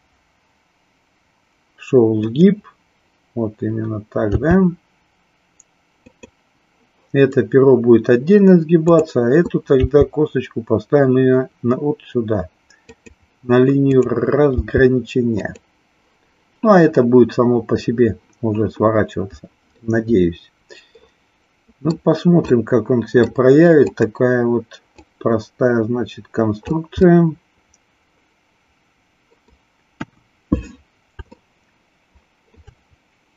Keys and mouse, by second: 2.3 click, 6.1 click, 8.9 click, 13.8 click, 14.5 g, 19.8-21.9 middle drag, 22.6 middle click, 23.8 click, 24.9-26.8 drag, 27.1-29.6 middle drag, 30.1 KP_1, 31.3-32.6 shift+middle drag.